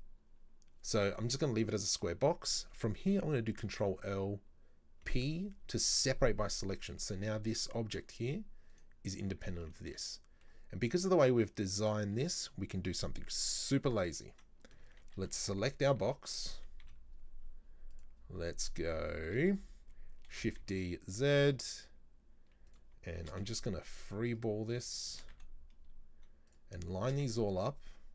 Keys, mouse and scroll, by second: 1.7-3.6 scroll down 1, 3.6 ctrl+l, 5.1 p, 6.6 scroll down 1, 6.9 middle click, 7.3 Tab, 7.5 right click, 8.8 right click, 9.5 right drag, 9.8-12.6 shift+middle drag, 12.6-13.6 scroll up 1, 13.6 Tab, 15.1 a, 15.4 KP_3, 16.9 z, 19.0-20.4 shift+scroll up 4, 19.2 shift+middle click, 20.4 shift+d, 23.2 shift+d, 27.1 shift+d.